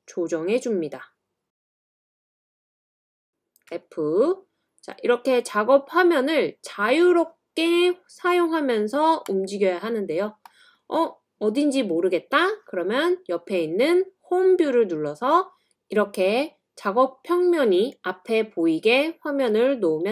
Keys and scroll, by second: 3.7 typing.